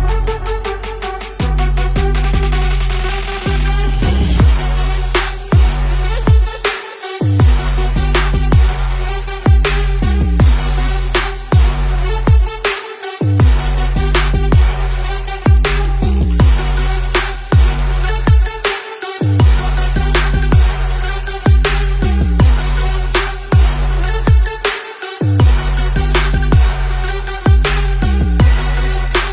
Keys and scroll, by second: 4.5-5.9 typing, 9.5-14.0 typing, 11.3 ctrl+z, 15.4 ctrl+shift+g, 17.7 space, 17.8 space, 17.8 space, 19.1-23.7 typing, 23.9 alt+Tab, 23.9 ctrl+v.